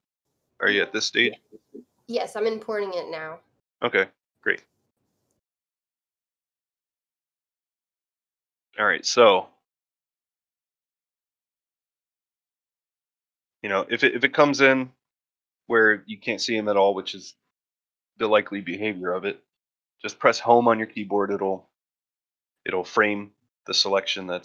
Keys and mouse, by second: 13.2 middle drag, 13.7 shift+middle drag, 14.1 ctrl+middle drag, 14.5 shift+middle drag, 23.4 middle drag, 23.9 shift+middle drag.